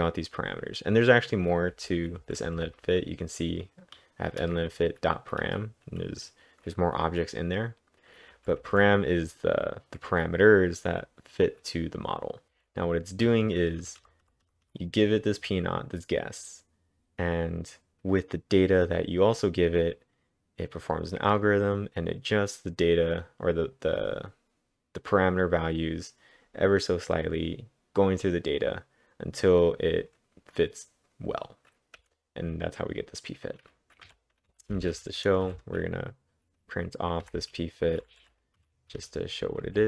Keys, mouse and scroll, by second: 1.8-3.4 typing, 8.3 typing, 12.2-14.7 typing, 16.7 typing, 32.0 j, 34.1 typing, 35.2-39.8 typing.